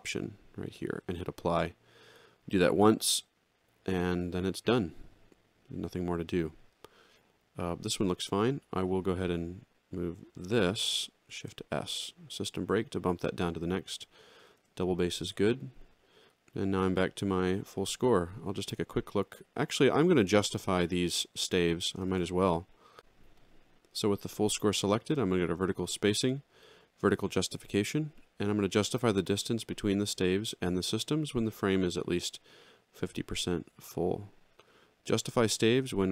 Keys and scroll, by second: 11.4 shift+s, 14.5 alt+shift+], 17.3 alt+x, 22.0 ctrl+shift+l, 31.6 5.